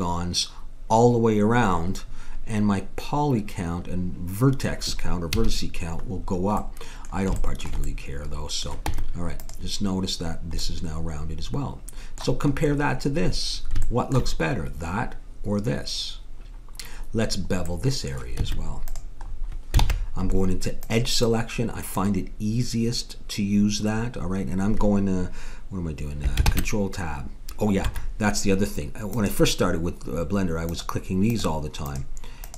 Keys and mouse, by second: 5.4 a, 5.5 middle click, 6.5 middle click, 6.8-7.9 middle drag, 8.8 Tab, 10.8-11.9 middle drag, 18.3 Tab, 19.8 ctrl+Tab, 26.4 ctrl+Tab, 29.1-32.5 drag.